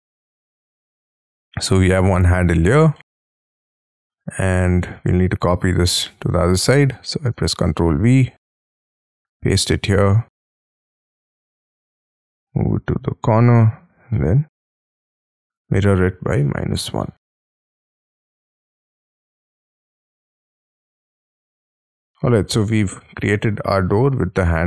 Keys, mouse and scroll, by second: 1.1-2.0 scroll down 12, 2.0 ctrl+c, 2.5 Escape, 2.9 middle click, 3.3-3.9 scroll down 9, 4.1 middle click, 5.2-5.6 scroll up 6, 5.7 scroll down 5, 5.9-6.4 scroll up 5, 7.1 scroll down 5, 7.5 ctrl+v, 7.6-10.4 ctrl+scroll up 7, 10.4 middle click, 13.3 shift+click, 13.6 middle click, 13.9 s, 14.1 middle click, 14.6-16.4 scroll up 4, 16.1-17.4 typing, 18.8 shift+click, 18.9 middle click, 20.6 shift+click, 20.8 space, 21.0-22.1 scroll down 24, 21.5 Escape, 22.1 middle click, 22.6 shift+scroll down 1, 22.9 shift+middle click, 23.8-24.2 scroll up 8.